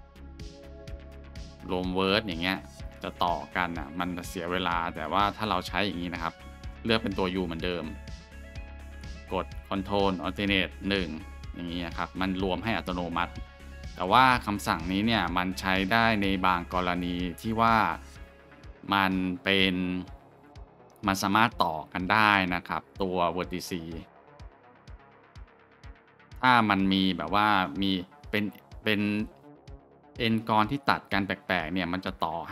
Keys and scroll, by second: 0.7 ctrl+z, 2.6 shift+2, 3.3 shift+2, 5.7 2, 10.9 ctrl+alt+shift+1.